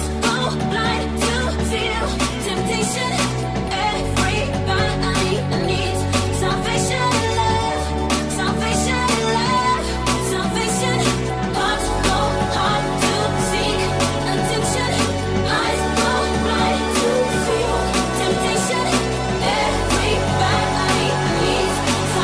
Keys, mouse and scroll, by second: 0.5 right click, 0.6-14.0 middle drag, 14.0 right click, 14.0 middle click, 14.2 right click, 14.3 middle click, 14.7 right click, 14.8-22.2 middle drag.